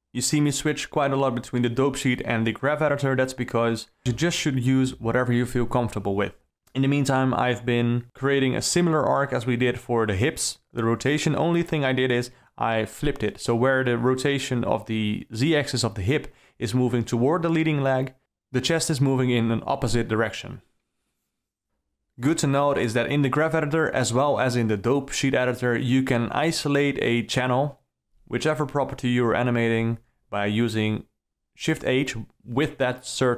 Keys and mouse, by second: 0.0 alt+a, 2.1 shift+click, 3.6 shift+F6, 4.4 click, 5.4 i, 7.1 alt+a, 7.5 click, 8.7 alt+a, 8.8 c, 10.2 g, 15.4 click, 21.5 click, 22.6 i, 24.5 i, 27.2 alt+a, 27.5 c, 28.7 g.